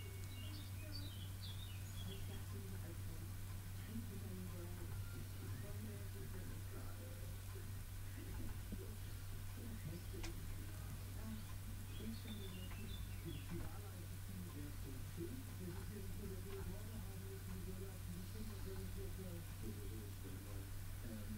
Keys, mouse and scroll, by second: 1.0-2.7 drag, 2.9 click, 4.4 click, 7.4 click, 10.5 click, 11.5-12.5 drag, 12.7 click, 14.9 click, 16.1 click, 17.8 click, 19.7-21.1 drag.